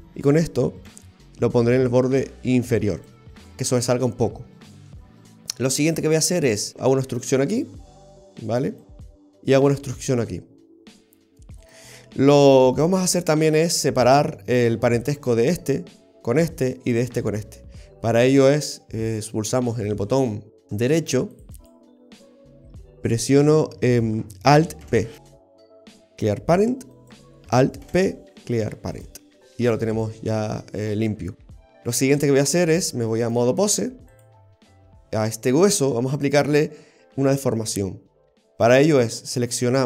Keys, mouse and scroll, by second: 22.2 scroll down 1, 24.9 alt+p, 27.0 right click, 28.0 alt+p, 33.3 click.